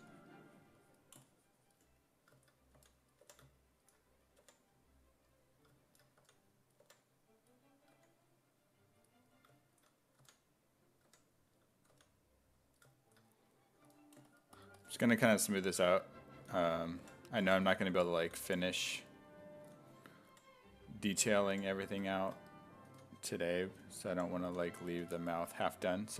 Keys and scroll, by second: 2.8 s, 3.3 5, 4.4 5, 6.2 s, 6.8 5, 7.9 1, 10.2 s, 11.1 1, 11.9 s, 13.8 s, 15.5-20.3 typing, 22.9-25.0 typing.